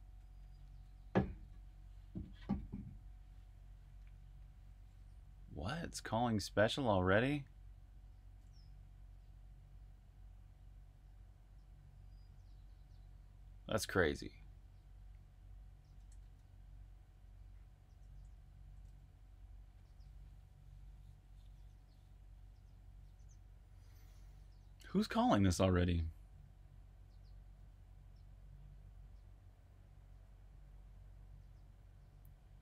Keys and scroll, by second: 16.1 super+Tab.